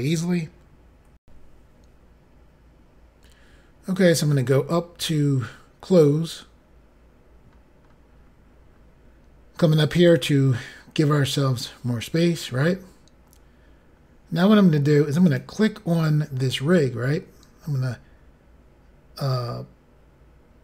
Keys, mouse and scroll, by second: 1.2 Insert, 3.9-5.2 scroll up 5, 6.9-7.3 scroll up 1, 8.8-9.8 scroll down 1, 10.0 click, 12.1-13.2 scroll down 4, 13.2-13.8 scroll down 1, 13.9 scroll up 3, 15.3 click.